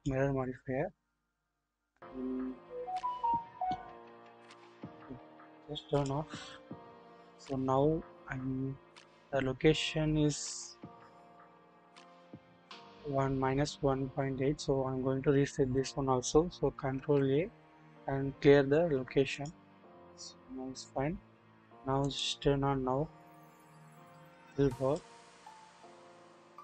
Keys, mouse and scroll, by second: 0.0 click, 5.9 click, 16.9 ctrl+a, 22.0 click, 25.0-26.6 drag.